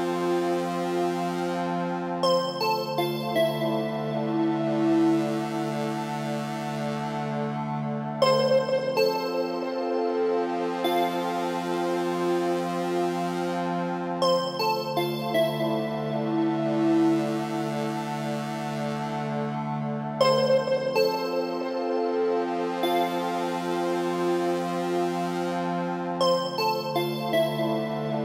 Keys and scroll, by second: 8.9 ctrl+g.